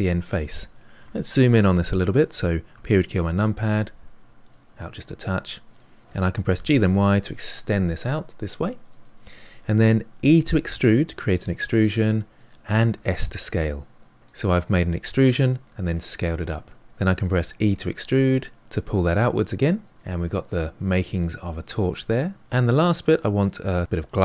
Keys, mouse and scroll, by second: 2.7 KP_Decimal, 3.7 scroll down 4, 4.4-6.4 middle drag, 6.4 g, 10.1 e, 12.9 s, 17.3 e, 19.9 scroll down 4, 19.9-22.3 middle drag, 22.4-24.2 scroll up 2.